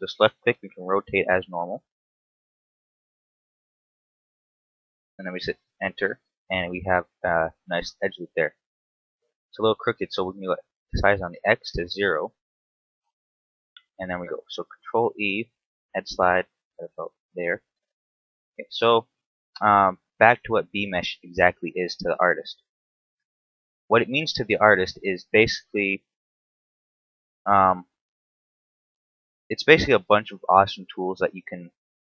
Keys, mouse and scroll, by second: 6.2 scroll down 3, 6.3 middle click, 8.4 KP_7, 9.1 scroll up 2, 9.4 shift+middle click, 10.5 s, 14.5 ctrl+e, 17.3 click, 18.2 right click, 19.0 shift+right click, 21.6 alt+right click, 22.3 shift+middle click, 22.7-23.2 scroll up 1, 23.3 shift+middle click, 24.5 middle click, 26.3 shift+d, 27.9 ctrl+click, 28.5 shift+d, 29.7 ctrl+click, 30.1 right click, 30.9 shift+right click, 31.5 right click.